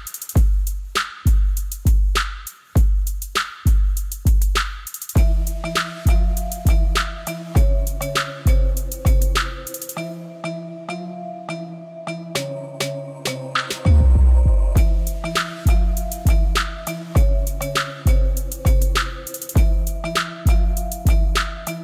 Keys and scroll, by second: 12.4-14.6 typing, 15.7 Return, 18.5 ., 18.8 3, 19.4 Return.